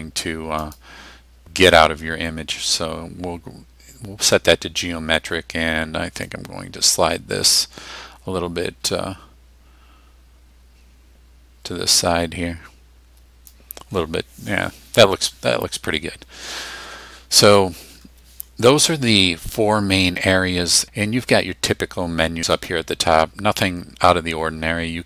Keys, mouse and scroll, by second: 0.6 click, 6.3-13.6 drag, 22.6 click.